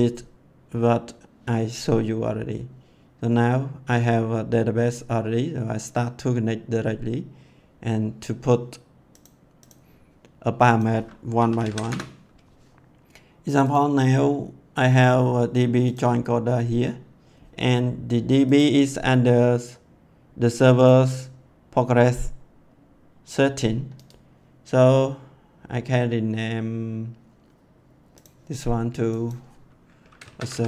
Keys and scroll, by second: 11.1-12.2 typing, 30.0-30.6 typing.